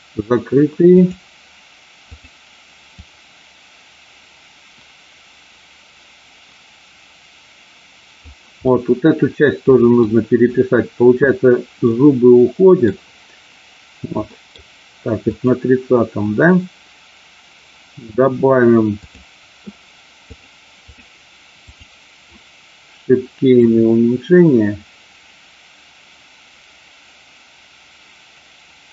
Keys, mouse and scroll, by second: 0.9 click, 2.1 click, 2.9-8.3 drag, 8.6-10.0 middle drag, 11.8-12.8 middle drag, 14.3 middle click, 15.3 click, 20.3 click, 23.5-28.9 drag.